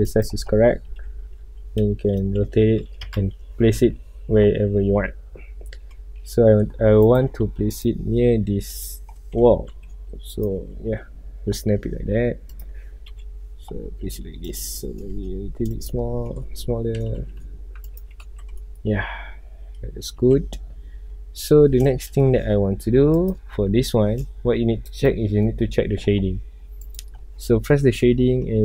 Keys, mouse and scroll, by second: 0.2 click, 0.8 r, 1.9 Escape, 2.3 r, 3.1 KP_Enter, 3.8 KP_7, 4.6 scroll up 1, 4.8 scroll down 1, 5.0-6.5 middle drag, 6.5 g, 7.2 right click, 7.7-9.5 drag, 9.5 g, 10.5 ctrl+click, 10.7 scroll up 1, 11.4 scroll down 1, 11.9 g, 12.7 click, 13.0 KP_1, 13.8 scroll up 1, 14.3 g, 14.7 click, 15.1 s, 16.0 click, 16.2 scroll down 1, 16.3-17.1 middle drag, 17.1 g, 18.1 ctrl+click, 18.4 alt+a, 18.6-20.3 middle drag, 20.3 ctrl+s, 20.5 scroll up 1, 20.8-21.6 middle drag, 21.6 scroll down 1, 22.0-22.7 shift+middle drag, 22.7 scroll up 1, 23.3-23.7 drag, 25.4 click, 27.8 scroll down 1.